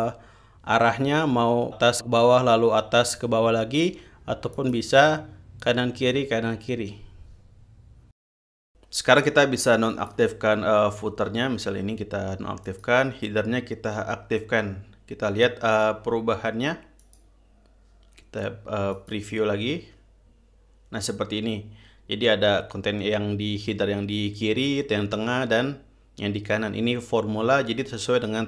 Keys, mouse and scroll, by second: 5.1 click, 10.5 click, 13.3 click, 17.7 click, 19.6 click.